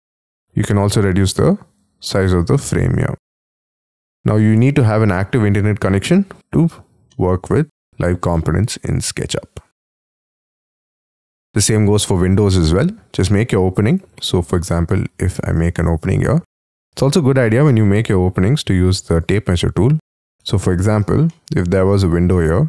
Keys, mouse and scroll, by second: 5.8 middle click, 7.1 middle click, 8.3 middle click, 8.9-10.2 scroll down 6, 10.2 middle click, 11.2-11.7 scroll down 14, 11.7 scroll up 1, 11.9 scroll down 2, 12.2-12.9 scroll up 7, 14.1 double click, 14.4 double click, 14.7 middle click, 15.4 space, 15.6 t, 16.4 middle click, 18.2 scroll up 4, 20.2 scroll down 6, 20.4 space, 21.0 y, 21.3 middle click, 22.3 middle click.